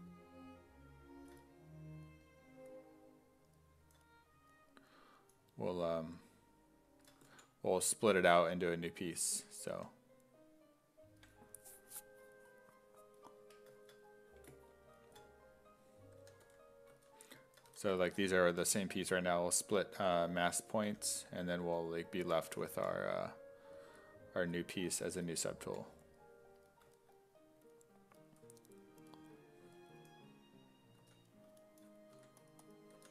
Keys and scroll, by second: 9.7 w, 16.0-17.7 typing, 20.9-23.3 typing, 24.4 s, 25.7 5, 31.0 s, 32.2-33.1 typing.